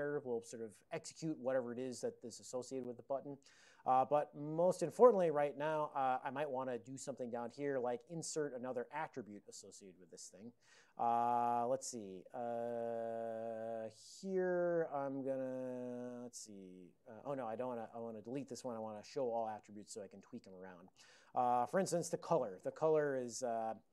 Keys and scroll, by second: 5.7 ctrl+n, 5.9 ctrl+n, 6.1 ctrl+n, 6.2 ctrl+n, 7.8 shift+Tab, 8.7 Return, 14.4 ctrl+p, 18.1 shift+Tab, 18.4 Return, 18.8 ctrl+n, 19.1 Tab, 19.5 Return, 20.4 ctrl+a, 21.0 ctrl+l, 22.5-23.4 typing.